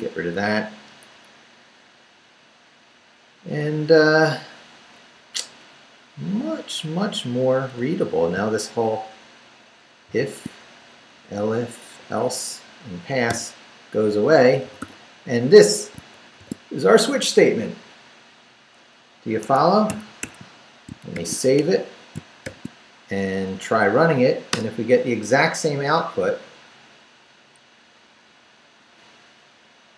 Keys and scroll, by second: 5.1 Up, 6.1 Down, 7.8 Down, 8.3 shift+Down, 10.1 shift+v, 10.9 shift+Down, 13.3 d, 14.6 d, 15.3 Up, 15.9 shift+Up, 16.4 shift+v, 19.4 Escape, 20.9 shift+Escape, 21.1 shift+;, 21.4 shift+w, 21.6 Return, 22.1 shift+Return, 22.4 shift+;, 23.3 shift+Up, 24.5 Return.